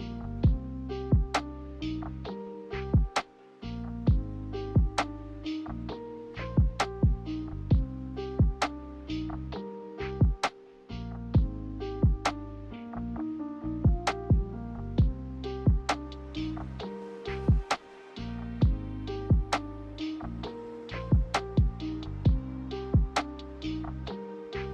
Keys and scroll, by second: 6.9 ctrl+z, 11.3 ctrl+z, 15.5 ctrl+z, 23.1-24.4 typing.